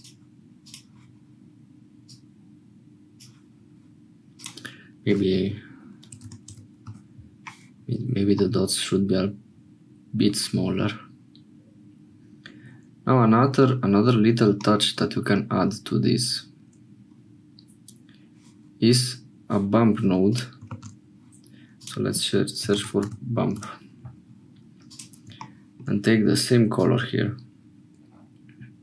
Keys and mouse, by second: 25.4-28.8 shift+middle drag.